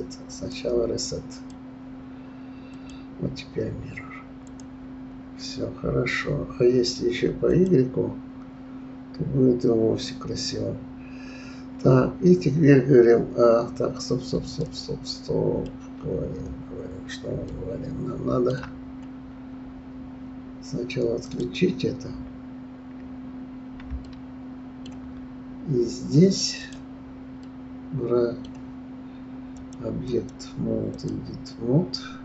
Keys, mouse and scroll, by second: 1.2 click, 2.7-5.7 drag, 7.4 click, 13.7 scroll up 3, 14.6-15.6 middle drag, 15.6-16.2 scroll down 3, 17.4-18.8 middle drag, 18.8-21.2 scroll up 2, 21.2 click, 24.0-25.5 shift+middle drag, 25.5-26.6 scroll up 3, 26.6 click, 27.4-29.5 middle drag, 29.5 click, 30.0-32.2 drag.